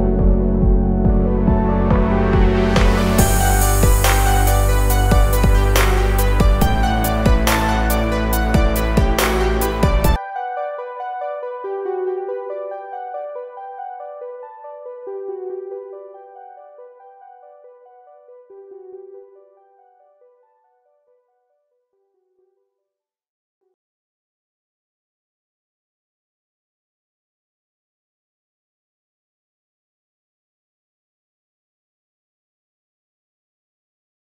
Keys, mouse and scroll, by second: 0.1 click, 3.7-5.9 typing, 10.0 click, 10.8-12.4 typing.